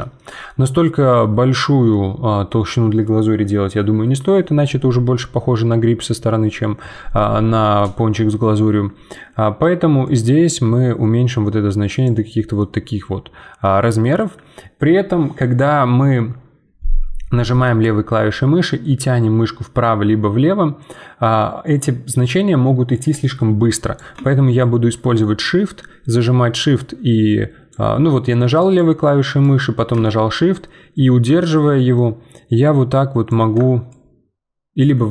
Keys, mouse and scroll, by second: 1.3-1.9 scroll up 2, 1.9-4.6 middle drag, 4.6 scroll down 2, 4.9-7.9 middle drag, 8.3-10.0 scroll up 2, 10.0-12.6 drag, 12.6-15.7 middle drag, 17.8-27.6 drag, 28.6 click, 29.4-32.4 drag, 33.9-35.1 shift+drag.